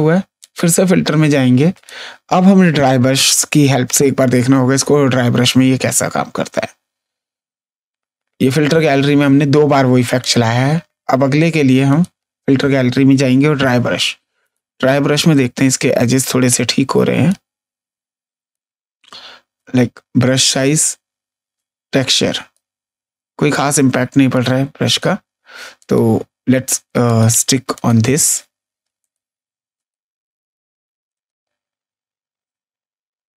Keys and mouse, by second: 0.3 click, 1.7 click, 10.1 click, 11.8 click, 14.3 click, 17.2 click, 19.5 click, 21.5 click, 23.4 click, 25.7 click, 27.0 click, 28.9 click, 31.1 click.